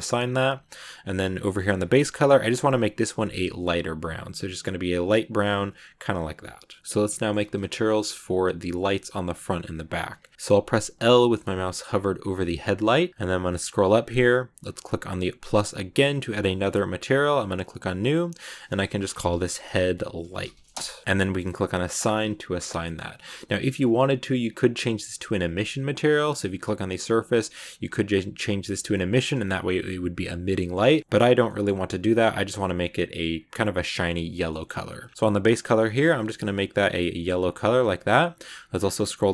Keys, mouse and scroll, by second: 0.0-0.9 scroll up 1, 0.9 scroll down 1, 1.6 click, 5.3 Tab, 5.6-8.8 middle drag, 8.8 scroll down 2, 9.0 middle click, 9.4-10.3 scroll up 2, 10.3 a, 13.3-14.6 scroll up 7, 15.3-18.0 drag, 18.0-21.0 drag, 21.9 click, 22.7 middle click, 23.0 scroll up 1, 26.4-29.5 drag, 30.4 middle click, 31.0 scroll down 1, 31.0 middle click, 31.9-33.7 scroll up 1, 33.7-34.4 scroll up 1, 34.4 middle click, 34.9-35.3 scroll down 3, 35.3 click, 38.0-38.4 scroll down 7, 38.4 scroll up 1, 38.5 scroll down 2, 38.7 scroll up 1, 38.7-39.3 scroll down 2.